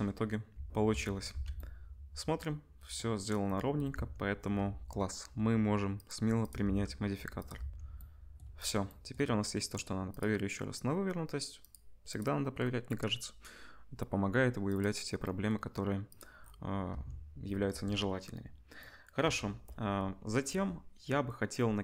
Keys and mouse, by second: 0.5 Tab, 0.9 Tab, 1.3 ctrl+s, 2.7-5.9 middle drag, 3.9 Tab, 5.9-7.4 drag, 6.6 Tab, 7.4-10.1 middle drag, 7.5 Tab, 10.1-14.8 drag, 14.8-16.1 middle drag, 16.1 click, 16.2-21.8 middle drag, 16.9 Tab.